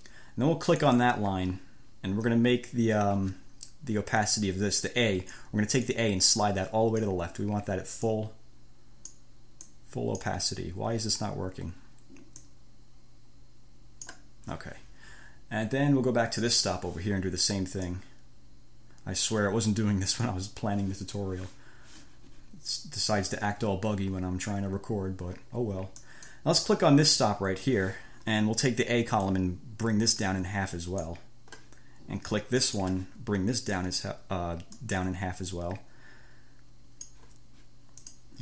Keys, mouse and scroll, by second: 1.1 click, 6.1-7.5 drag, 8.3-9.6 drag, 9.9 click, 12.6-14.5 drag, 16.6 click, 18.1-20.7 drag, 26.2 click, 29.5-31.5 drag, 32.9 click, 34.9-37.5 drag, 38.3 click.